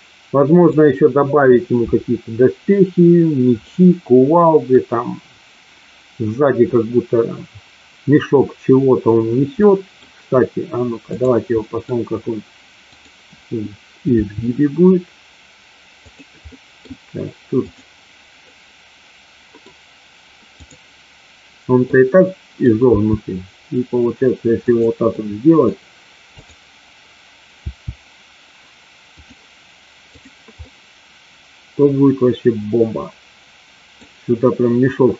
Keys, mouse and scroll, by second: 3.7-4.7 middle drag, 9.7 middle click, 11.0 click, 11.5 middle click, 13.0-13.8 drag, 14.2 r, 16.4 middle click, 17.7 click, 18.7 middle click, 21.8 middle click, 22.9 r, 24.7 click, 25.2 middle click, 26.3-27.2 drag, 27.7 r, 29.2 click, 30.0 click, 30.5-33.9 middle drag.